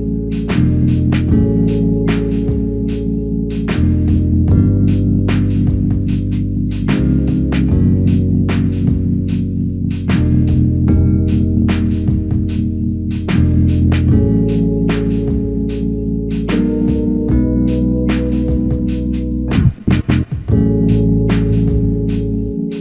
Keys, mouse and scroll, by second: 1.6 alt+click, 4.1 alt+click, 4.4 shift+click, 5.4 shift+click.